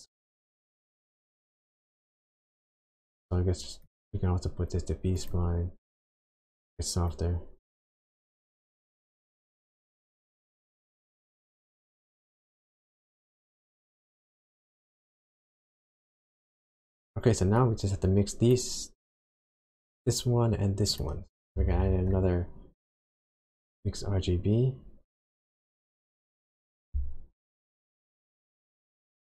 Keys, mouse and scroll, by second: 0.5 click, 3.8 click, 7.1 click, 9.9 click, 12.1 click, 13.5-14.6 scroll down 5, 14.9 scroll down 2, 15.9 middle click, 16.9-17.2 scroll up 1, 17.6 click, 20.9 click, 21.3-21.6 scroll down 1, 21.8 shift+a, 27.7 click.